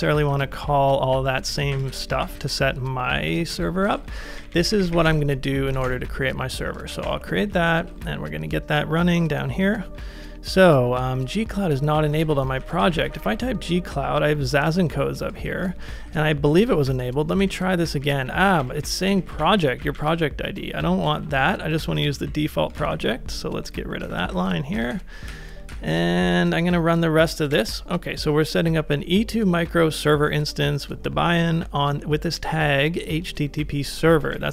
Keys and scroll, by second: 0.0-5.8 typing, 2.4 ctrl+c, 3.5 Return, 6.9 ctrl+a, 7.0 shift+', 7.6 super+v, 12.0 ctrl+c, 12.1 ctrl+c, 12.3 ctrl+c, 12.4-13.7 typing, 15.5 ctrl+c, 16.0 ctrl+c, 16.1 ctrl+c, 16.6 super+v, 17.4 Up, 17.5 Up, 18.0 Up, 18.2 Up, 18.3 Up, 18.6 alt+Right, 18.8 alt+Right, 20.8 Left, 21.0 Left, 21.2 Left, 21.4 Left, 21.7 Left, 21.9 Left, 22.0 Left, 22.2 Left, 23.8-25.3 typing, 27.5 Return, 34.2 ctrl+a, 34.3-34.5 typing.